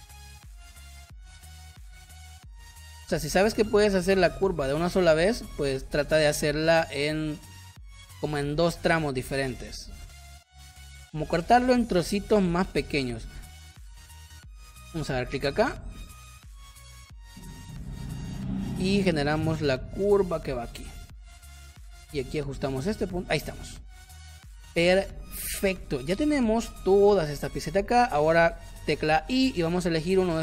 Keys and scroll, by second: 13.4 space, 23.6 v, 24.8 space, 26.5 space, 27.6 space, 29.1 i.